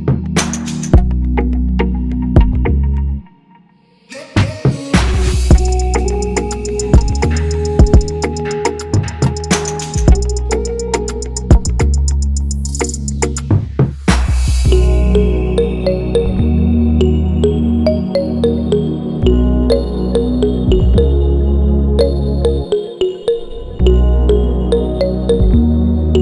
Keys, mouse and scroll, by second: 1.6 shift+click, 2.4 shift+click, 5.1 shift+click, 6.4 shift+click.